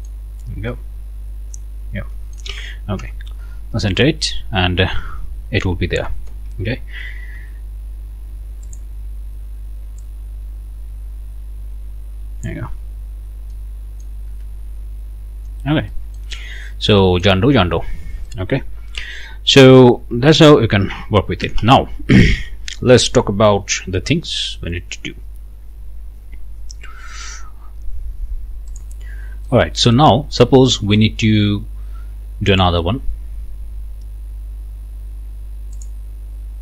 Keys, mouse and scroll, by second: 0.7-2.6 right drag, 3.0 Return, 5.7 scroll up 2, 6.1 right click, 7.3 ctrl+t, 7.9-8.2 ctrl+scroll up 2, 8.6 click, 10.0-12.7 drag, 13.2 scroll down 2, 13.5 click, 14.3 Return, 15.2 scroll down 2, 15.9 right click, 16.6 scroll down 1, 17.0 right click, 18.3 right click, 19.9 right click, 21.4 ctrl+s, 28.7 click, 29.5 click, 30.2 scroll down 1, 30.6 click, 32.5 click, 35.8 click.